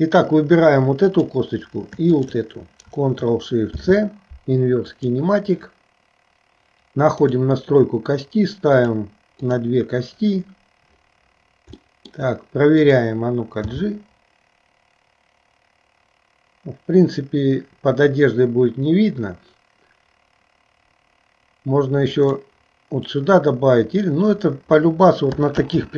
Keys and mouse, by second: 1.1 click, 2.3 shift+click, 3.7 ctrl+shift+c, 7.2 click, 9.0 click, 9.6 click, 12.1 shift+middle click, 13.0 click, 13.8 g, 25.7 ctrl+z.